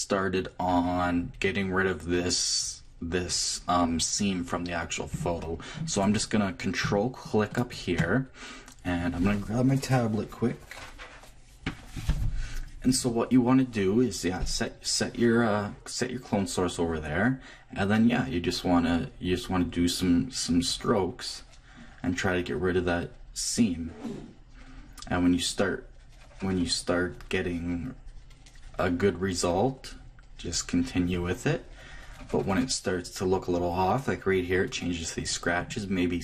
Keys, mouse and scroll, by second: 4.6-5.7 middle drag, 5.1 Left, 6.8 click, 7.5-9.5 drag, 18.9-21.4 drag, 35.6 click.